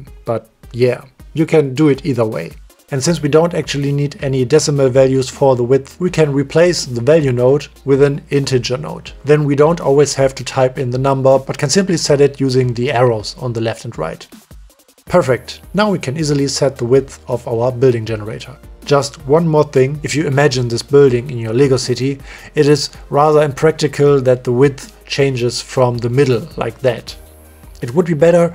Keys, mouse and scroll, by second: 0.7 middle click, 3.2 click, 3.5 click, 5.2 middle click, 6.6 shift+a, 8.2-8.5 drag, 8.7 click, 9.1 Delete, 9.3 click, 10.1 click, 10.5 click, 12.0 click, 13.2 click, 13.6 click, 14.3 middle click, 15.1 middle click, 15.8 middle click, 16.3 middle click, 16.6 click, 17.2 middle click, 17.4 middle drag, 19.9 click, 20.5 click, 21.1 click, 21.6 click, 23.9-24.5 middle drag, 25.4 click, 25.7 click, 25.9 click, 26.5 click, 28.0 middle click.